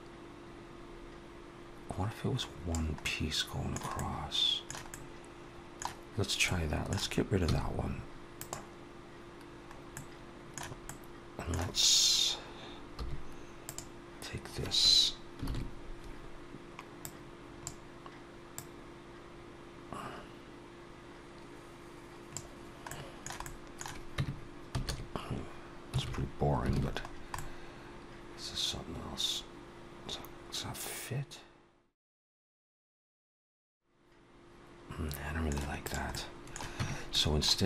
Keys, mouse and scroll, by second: 2.8 middle click, 3.8 middle click, 5.1 middle click, 6.4 middle click, 7.3 x, 9.7 middle click, 10.7 middle click, 12.8 3, 13.4 click, 15.3 ctrl+KP_7, 16.9 click, 18.4 click, 22.7 middle click, 23.3 middle click, 24.0 Tab, 24.7 a, 26.0 scroll down 3, 26.6 alt+a, 26.9 scroll down 3, 27.2 middle click, 32.3-33.0 scroll up 4, 33.0 middle click, 35.7 click, 36.0 middle click, 36.6 Tab, 36.9 middle click.